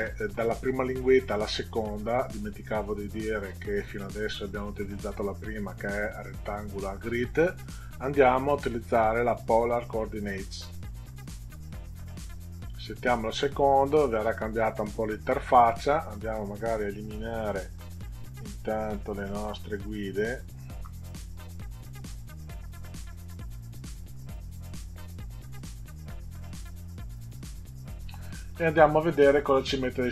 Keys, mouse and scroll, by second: 10.7 click, 17.1 click, 17.7 Delete, 19.9 click, 20.7 Delete, 22.4 click, 24.1 Delete, 25.1 Delete, 26.8 Delete, 27.5 Delete.